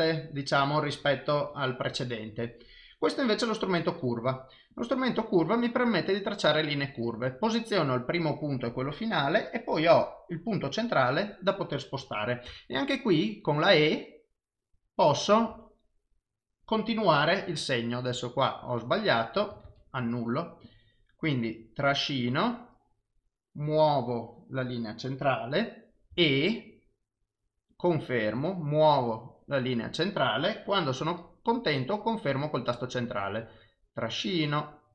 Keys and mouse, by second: 3.3 click, 4.7 click, 19.7 ctrl+z, 20.7 click, 21.8 click, 33.3 click.